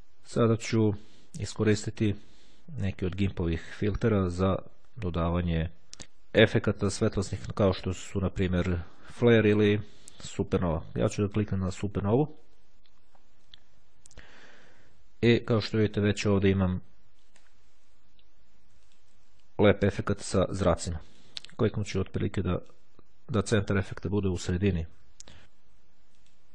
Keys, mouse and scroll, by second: 2.1 click, 12.1 click, 15.4 click, 16.3 click, 16.9-18.7 scroll up 2, 18.9 ctrl+click, 20.9 click, 23.5 click, 25.4-25.8 scroll up 1, 26.3-26.5 drag.